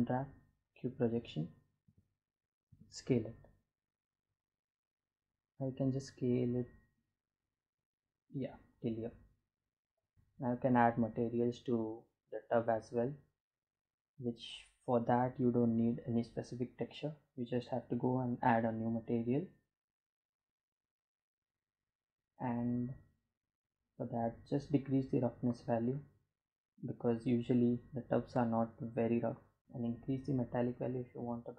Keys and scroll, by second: 0.3 a, 1.1 s, 9.6 Tab.